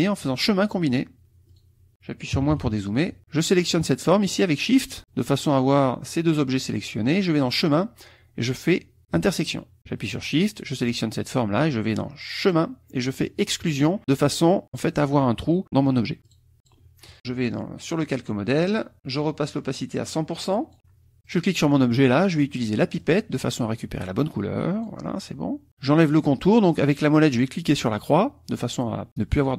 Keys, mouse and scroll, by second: 0.2 click, 1.4 click, 2.3 KP_Subtract, 4.8 shift+click, 7.4 click, 9.1 click, 10.4 shift+click, 12.4 click, 13.6 click, 14.6 click, 16.2 click, 16.6 click, 17.1 KP_Subtract, 18.0 click, 18.8 click, 19.9-20.9 drag, 21.2 click, 23.0 click, 24.3 click, 27.8 click.